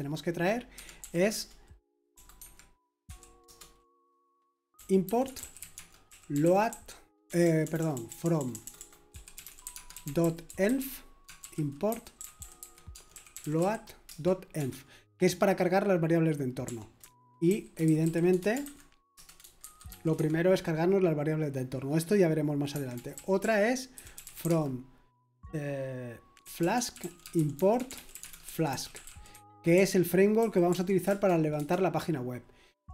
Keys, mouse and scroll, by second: 0.7 Escape, 1.0-14.6 typing, 16.4-20.6 typing, 22.7-24.9 typing, 26.1-31.5 typing.